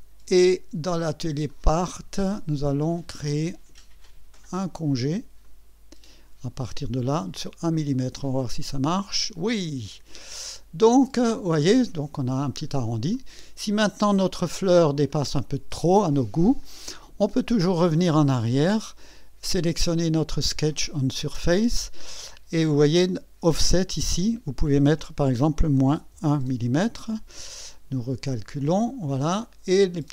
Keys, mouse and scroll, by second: 0.8 click, 1.5 click, 5.4 click, 8.2 click, 9.9-12.3 drag, 12.7 scroll down 1, 13.1-15.0 drag, 15.2 scroll up 1, 18.3 click, 19.7 click, 24.1 click, 25.7 KP_Subtract, 26.1 KP_1, 26.5 KP_Enter, 29.4-30.1 drag.